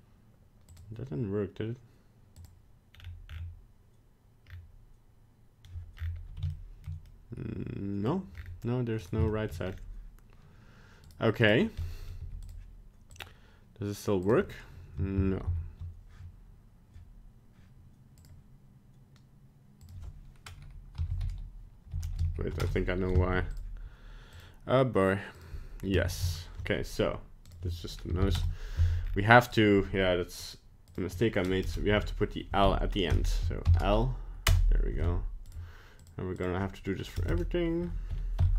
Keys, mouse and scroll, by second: 0.7 click, 2.4 click, 2.9-4.4 scroll down 8, 4.5-4.9 scroll up 2, 6.0-6.4 scroll up 5, 6.5 shift+middle click, 7.1 middle click, 8.4 scroll up 4, 9.0 right click, 9.3 shift+middle click, 9.7-10.2 scroll up 3, 11.1 right click, 11.4 right click, 11.6 scroll down 2, 11.8 middle click, 12.1 middle click, 12.2 g, 13.1 click, 15.2 ctrl+z, 15.5 ctrl+z, 18.2 click, 19.8 click, 23.3 g, 24.3 click, 26.1 ctrl+z, 26.2 ctrl+z, 27.4 click, 29.1-29.4 scroll up 4, 29.5 right click, 30.4 click, 35.5 right click, 36.0 click, 37.3 BackSpace.